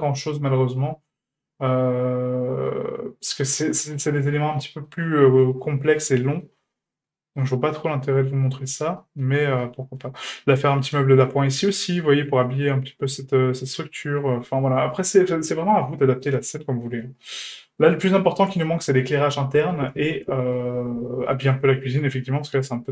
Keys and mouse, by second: 0.8-4.9 middle drag, 5.5-5.8 shift+middle drag, 6.3 middle drag, 6.7-7.1 shift+middle drag, 7.3-8.3 middle drag, 8.4-8.8 shift+middle drag, 9.0 middle drag, 9.6-10.0 shift+middle drag, 10.2 middle click, 11.9-12.3 middle drag, 13.8-14.2 middle drag, 14.4 shift+middle drag, 14.9 middle drag, 15.3-15.6 shift+middle drag, 16.0 shift+middle drag, 16.5-16.9 middle drag, 17.2-17.8 middle drag, 20.5-21.4 middle drag, 21.8 shift+middle drag, 22.5-22.9 shift+middle drag.